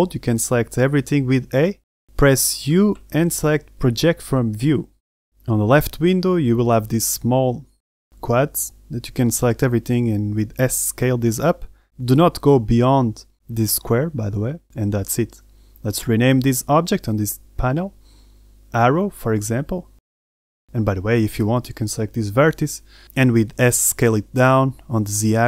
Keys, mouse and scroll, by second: 0.1 Tab, 0.6 a, 0.8 a, 2.9 KP_7, 3.7 ctrl+z, 3.8 u, 8.0-8.6 scroll up 2, 9.0 a, 9.7 s, 10.7 g, 12.6 s, 13.2 g, 15.9 Tab, 16.6 middle click, 17.8 click, 18.4 click, 18.8 click, 19.9 r, 21.6 Tab, 21.6 middle click, 21.6 scroll up 1, 21.7 shift+right click, 22.1 shift+right click, 22.3 shift+right click, 22.5 middle click, 23.0 shift+right click, 23.2 shift+right click, 23.5 shift+right click, 23.6 shift+right click, 24.1 shift+right click, 24.3 scroll down 1, 24.6 s.